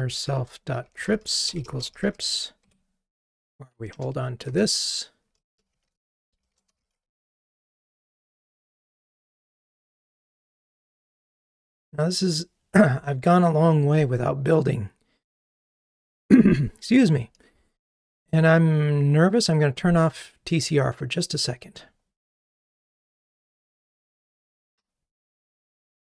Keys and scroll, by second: 2.6 Escape, 3.9 alt+Return, 8.3 Escape.